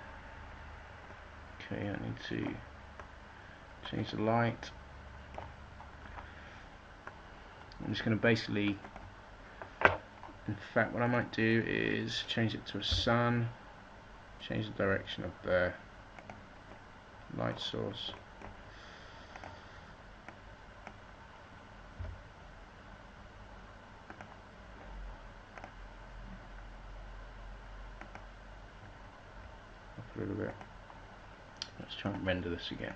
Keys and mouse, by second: 0.0 Escape, 7.4-11.1 middle drag, 13.0 r, 16.3-19.4 middle drag, 22.1 r, 24.7 click, 29.5 r.